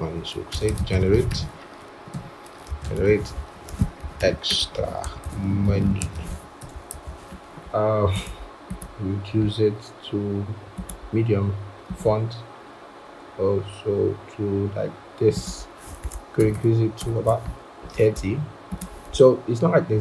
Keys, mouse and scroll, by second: 0.5-6.0 typing, 16.3 ctrl+shift+., 16.4 ctrl+shift+., 16.9 ctrl+shift+., 19.4 shift+Up, 19.9 shift+Up.